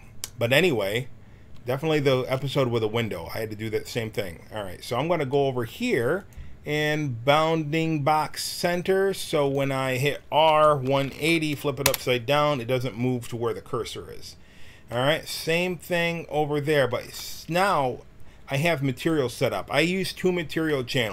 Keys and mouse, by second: 3.2-7.7 middle drag, 7.7-10.4 drag, 10.4 r, 14.9-16.6 middle drag, 18.9-20.6 drag, 20.6-21.1 middle drag.